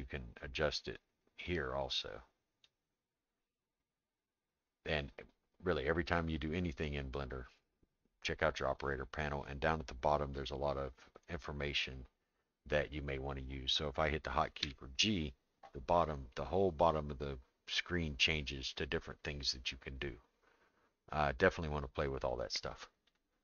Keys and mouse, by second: 1.4-2.7 drag, 14.6 g.